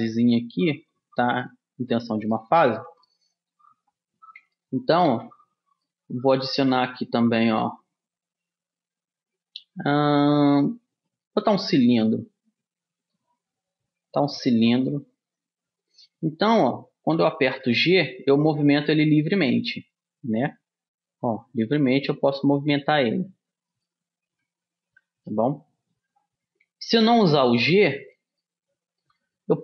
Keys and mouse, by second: 5.2 a, 6.0-8.4 middle drag, 6.9 shift+a, 12.2-14.1 middle drag, 14.6 middle click, 15.5-17.3 drag, 17.7 g, 25.0 ctrl+z, 27.5 click, 28.2-29.6 middle drag.